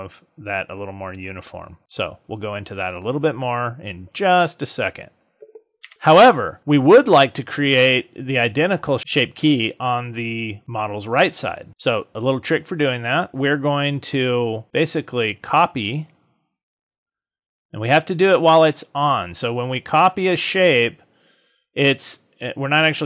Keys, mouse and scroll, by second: 5.8 Tab, 16.0 click.